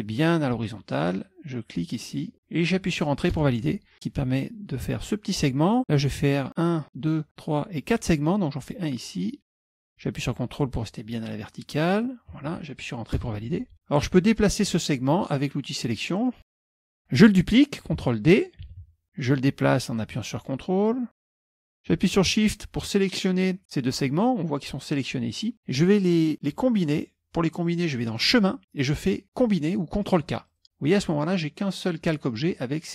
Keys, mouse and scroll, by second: 2.1 ctrl+click, 3.4 Return, 9.5 click, 12.0 ctrl+click, 13.3 Return, 16.2 click, 16.6 click, 18.8 ctrl+d, 19.0-21.7 drag, 22.5 shift+click, 28.2 click, 30.6 click.